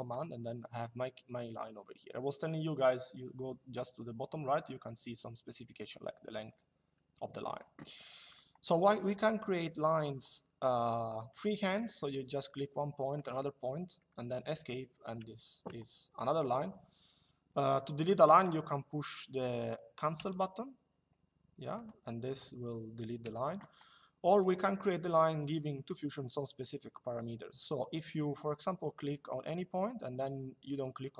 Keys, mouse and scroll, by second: 8.0 click, 11.0 click, 12.9 click, 14.0 Escape, 16.1 click, 19.9 Delete, 21.4 click, 22.9 Delete, 24.0 click, 29.1 click.